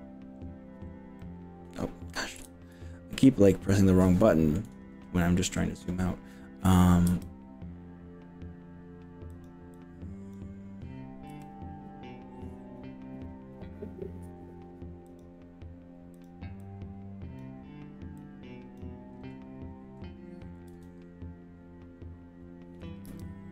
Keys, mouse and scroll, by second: 0.4-0.9 scroll up 4, 1.2 middle click, 2.4 KP_1, 3.1 shift+middle click, 3.9 middle click, 7.1 g, 9.3 click, 9.7 click, 11.3 g, 15.1 drag, 16.1 click, 16.6-17.5 drag, 18.2-18.9 drag, 20.7 s, 23.1 0.